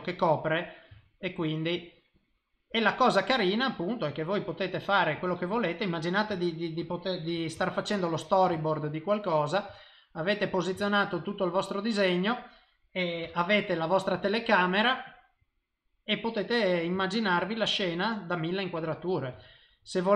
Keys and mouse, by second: 0.9 shift+middle click, 1.4 middle click, 2.1 click, 2.9 click, 3.5 click, 4.8 click, 5.1 click, 5.4 click, 5.8 middle click, 6.4 ctrl+middle click, 6.9 middle click, 7.6 shift+middle click, 8.0 middle click, 8.4 i, 8.6 shift+middle click, 8.9 middle click, 9.7 shift+middle click, 10.2 middle click, 10.8 shift+middle click, 11.1 middle click, 13.2 KP_0, 15.6 middle click, 17.0 shift+middle click, 17.4 middle click, 19.4 ctrl+middle click, 19.8 middle click.